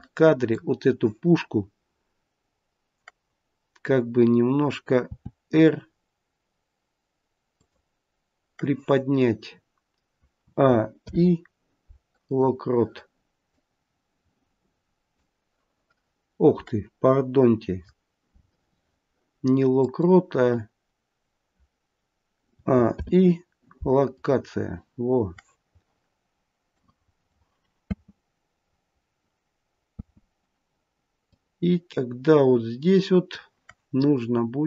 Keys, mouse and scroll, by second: 5.0 r, 10.3 a, 10.9 i, 13.4 click, 19.7 click, 22.4 a, 22.8 i, 26.6 click, 27.8 space, 29.8 space, 31.2 click.